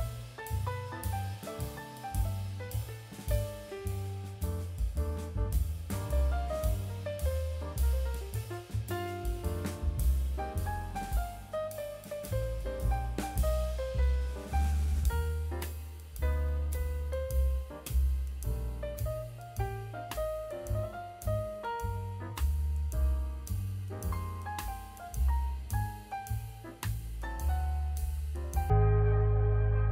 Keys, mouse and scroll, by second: 0.1 click, 1.8 g, 4.3 g, 6.3 middle click, 7.0 KP_0, 8.2-8.8 shift+middle drag, 14.4 n, 16.8 click, 17.6-19.1 shift+middle drag, 19.2-20.4 middle drag, 20.6 shift+middle click, 21.3-21.8 middle drag, 21.9-24.8 shift+middle drag, 24.9 scroll up 1, 25.4-29.9 shift+middle drag.